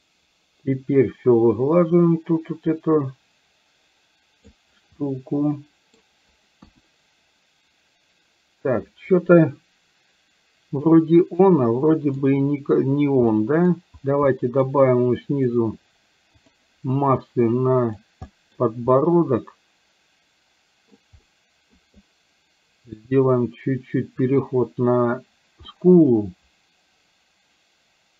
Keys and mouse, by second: 5.1-6.1 middle drag, 6.6 KP_1, 10.8-12.3 middle drag, 13.3 middle click, 14.3 middle click, 15.2 click, 16.4 click, 17.6 click, 18.4 middle click, 18.9-20.9 middle drag, 21.3 middle click, 22.9-24.4 drag, 25.7-27.9 middle drag.